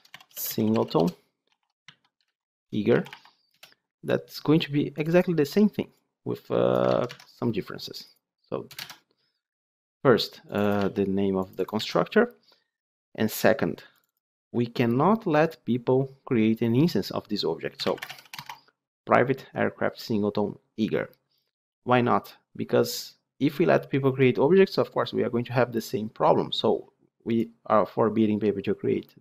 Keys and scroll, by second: 6.8 ctrl+c, 7.0 ctrl+Tab, 8.7 ctrl+v, 10.7 ctrl+c, 11.6 ctrl+v.